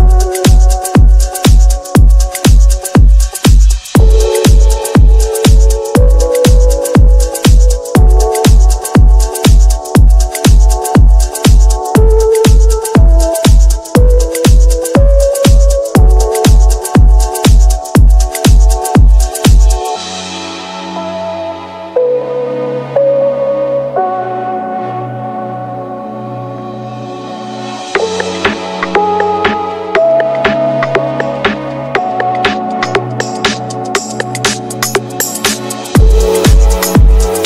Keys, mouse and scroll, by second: 1.0 shift+s, 6.7 click, 8.5-9.6 middle drag, 12.0 middle click, 35.5 typing, 37.1 typing.